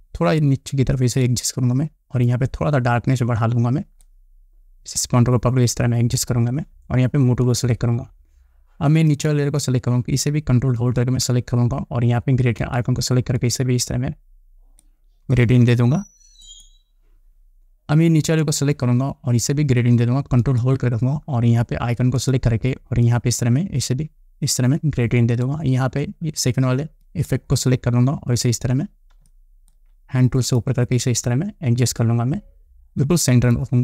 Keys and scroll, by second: 29.8 space.